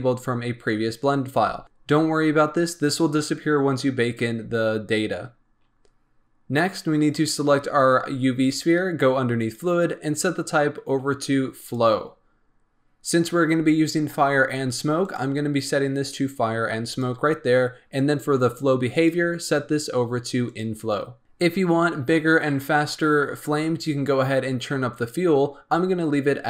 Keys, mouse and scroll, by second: 3.7-5.0 scroll down 4, 7.1 click, 9.3-21.2 drag.